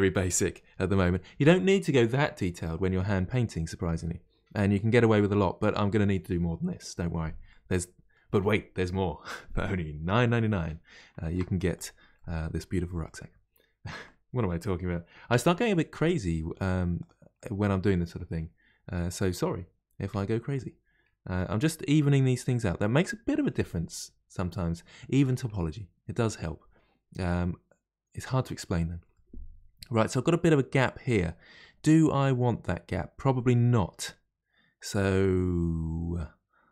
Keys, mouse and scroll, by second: 7.5-10.5 middle drag, 11.2 ctrl+r, 12.1 middle click, 13.0 click, 14.0 g, 17.3-20.1 middle drag, 20.1 1, 20.5 click, 21.3 g, 22.9-28.5 middle drag, 29.1-32.9 middle drag, 32.9-33.3 scroll up 1, 33.3-36.3 middle drag.